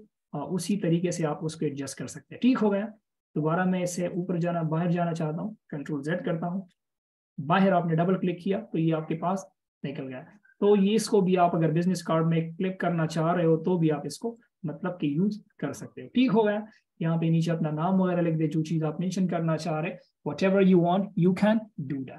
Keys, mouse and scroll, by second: 1.1 double click, 6.3 ctrl+z, 7.7 double click, 11.1 alt+shift+click, 14.7 alt+shift+click, 17.9 alt+shift+click.